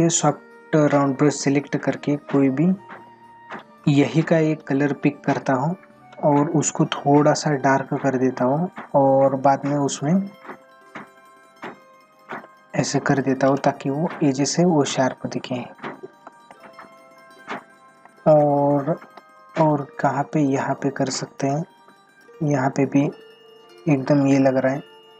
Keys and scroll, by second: 16.3 space.